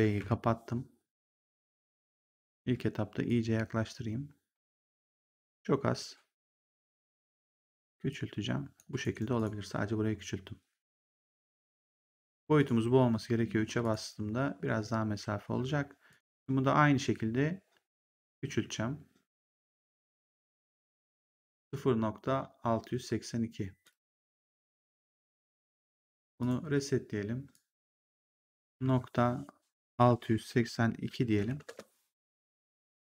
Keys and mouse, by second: 0.1 b, 2.5 w, 3.2 click, 5.2 r, 5.8 click, 7.4 w, 8.0 click, 8.9 right click, 9.3 click, 12.5 click, 13.1 3, 13.7 click, 16.0 click, 18.5 r, 20.2 click, 23.7 click, 26.3 click, 27.4 click, 28.7 KP_Decimal, 29.9 6, 31.2 2, 31.6 Return.